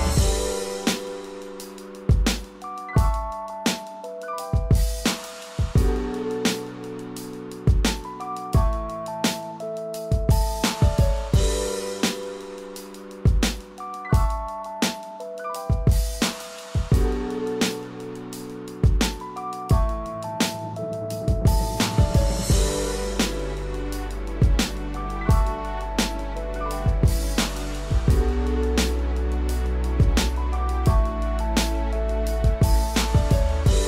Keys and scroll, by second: 4.9 ctrl+z, 9.5 ctrl+0, 26.6 ctrl+=.